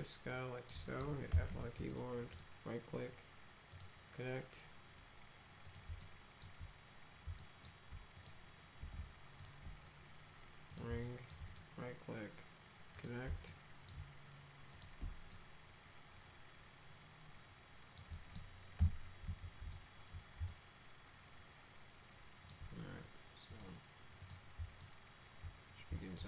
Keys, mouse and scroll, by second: 0.0 alt+middle click, 0.9 middle click, 1.1-2.0 typing, 1.9 middle click, 2.4 right click, 3.7 click, 5.7 click, 6.0 alt+middle click, 7.4 alt+middle click, 8.2 click, 9.4 ctrl+click, 10.7 click, 11.0 alt+middle click, 11.5 right click, 13.0 click, 13.5 alt+middle click, 14.8 click, 15.3-18.0 alt+middle drag, 18.1 middle click, 18.8 p, 19.3 z, 19.7 alt+middle click, 20.5-22.5 alt+middle drag, 23.5 click, 24.2 click, 24.8 alt+middle click, 26.1 alt+middle click.